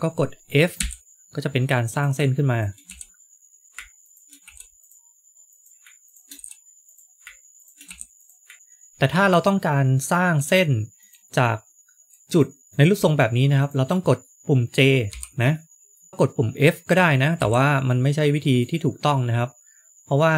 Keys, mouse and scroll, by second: 0.8 f, 2.4 shift+click, 3.6 ctrl+z, 3.6 click, 3.6 f, 3.9 shift+click, 4.7 click, 5.4 click, 6.0 shift+click, 6.8 click, 7.5 shift+click, 10.9 click, 12.2 click, 12.6 ctrl+z, 12.6 click, 12.6 click, 13.5 shift+click, 13.8 shift+click, 13.9 middle click, 15.0 j, 17.3 f, 18.4 click.